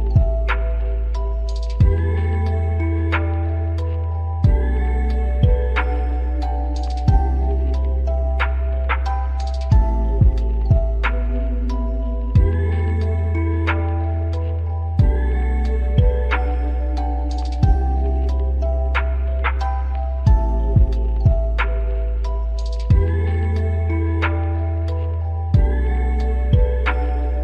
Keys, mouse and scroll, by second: 0.1 alt+right click, 2.9-3.2 scroll up 1, 3.3 alt+click, 4.7 alt+click, 7.2 alt+middle click, 9.1 alt+click, 12.3 double click, 12.7 scroll down 2, 13.0 alt+click, 15.3 alt+scroll up 1, 15.8 alt+middle click, 16.1-16.9 scroll down 2, 16.9 alt+middle click, 17.2 alt+click, 19.0-19.4 scroll down 1, 19.5 alt+click, 20.1-20.4 scroll down 1, 20.4 alt+click.